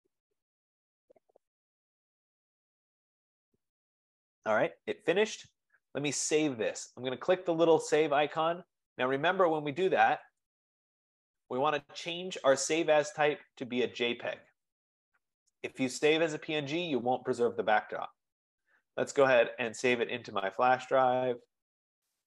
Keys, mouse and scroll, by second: 8.9 click, 10.6 click, 13.2 click, 14.9 click, 15.6 F15, 19.3 click, 22.3 click.